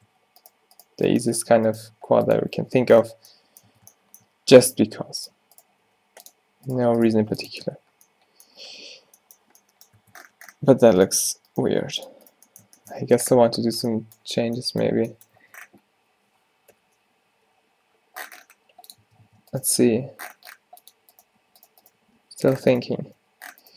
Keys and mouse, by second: 1.4 f, 1.9 g, 2.6 Tab, 3.8 Tab, 5.0 g, 5.9 g, 7.3 g, 7.6 Tab, 10.1 Tab, 11.1 middle click, 11.8 g, 13.1 Tab, 13.7 middle drag, 15.5 Tab, 16.8 o, 17.5 g, 19.1 Tab, 19.3 Tab, 19.7 g, 21.4 g, 21.9 g, 22.9 g.